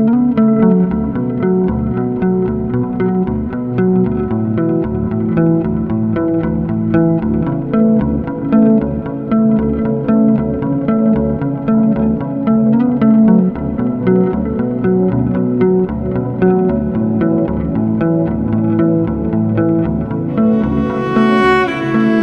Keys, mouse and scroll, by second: 1.0 F9, 1.5 click, 4.5 click, 6.3 click, 7.7 click, 9.3 ctrl+r, 9.8 click, 10.5 ctrl+click, 11.0 ctrl+click, 11.9 ctrl+r, 12.2 click, 13.7 click, 15.3 ctrl+click, 16.6 click, 17.9 click, 19.8 click, 20.6 ctrl+click.